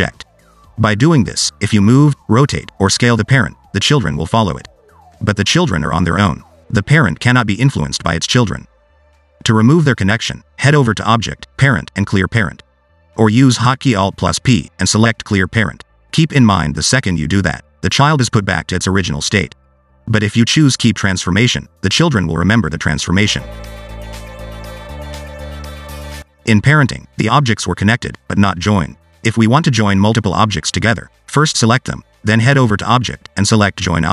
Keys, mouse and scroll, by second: 0.9 click, 1.4 g, 3.8-4.2 scroll down 2, 4.2 g, 5.7 click, 6.2 g, 8.6 click, 15.0 alt+p, 16.6-18.3 scroll down 2, 19.8 ctrl+z, 20.9 alt+p, 25.6 click, 28.9 shift+click, 29.6 shift+click, 31.4 click.